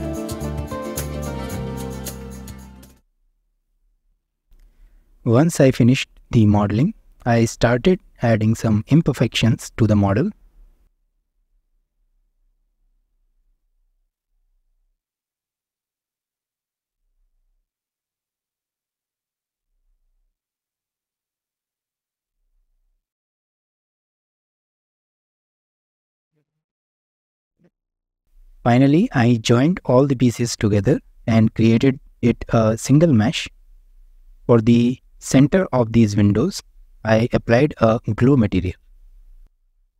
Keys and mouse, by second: 0.7 shift+d, 1.3 middle drag, 1.9 middle click, 1.9 g, 2.5 click, 2.5 middle click, 2.8 shift+middle click, 3.1 shift+middle click, 3.3 middle click, 3.5 shift+middle click, 3.7 middle click, 4.0 middle click, 4.5 shift+middle click, 4.8 Tab, 5.0 middle click, 5.3-6.7 typing, 7.3 Tab, 7.4 click, 7.4 Tab, 7.6 click, 7.8 s, 8.3 click, 8.5 click, 8.8 g, 9.0 drag, 9.2 Tab, 9.3 shift+middle click, 9.5 Tab, 9.6 middle click, 9.8-11.9 typing, 10.3 Tab, 10.3 shift+click, 10.5 click, 10.6 Tab, 11.6 click, 12.8 Tab, 12.8 click, 13.0 Tab, 13.1 shift+click, 13.3 drag, 13.6 g, 13.8 z, 14.1 Tab, 14.2 shift+middle click, 14.3 shift+middle click, 14.4 alt+z, 14.7 s, 15.2 Tab, 15.3 shift+middle click, 15.4 alt+z, 15.7 click, 15.8 Tab, 16.0 Tab, 16.1 alt+z, 16.3 Tab, 16.4 click, 16.9 g, 17.3 Escape, 17.6 g, 17.8 click, 18.1 Tab, 18.1 middle click, 18.3 alt+z, 18.5 shift+middle click, 18.8 Tab, 19.1 Tab, 19.1 middle click, 19.2 Tab, 19.5 alt+z, 19.6 shift+middle click, 20.0 click, 20.3 s, 20.6 click, 20.7 Tab, 20.7 drag, 20.9 alt+z, 21.1 ctrl+r, 21.7 1, 21.8 alt+z, 21.9 click, 22.1 s, 22.5 click, 22.7 s, 23.0 click, 23.2 s, 23.6 Tab, 23.6 shift+middle click, 23.9 ctrl+r, 24.7 1, 24.8 click, 25.0 s, 25.8 s, 26.1 click, 28.6 shift+middle click, 29.3-30.1 middle drag, 30.3 shift+middle click, 31.0-31.4 middle drag, 32.0-32.3 middle drag, 32.6 shift+middle drag, 33.1-33.5 middle drag, 33.8-34.2 middle drag, 34.5-34.8 shift+middle drag, 35.0-35.3 middle drag, 36.4-36.8 shift+middle drag, 37.1 middle click, 38.8 shift+middle click.